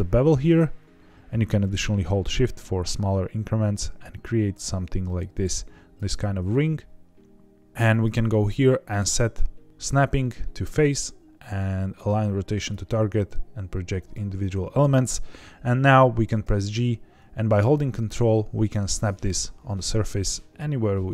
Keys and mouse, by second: 6.6-7.7 middle drag, 7.9-14.3 drag, 16.4 g.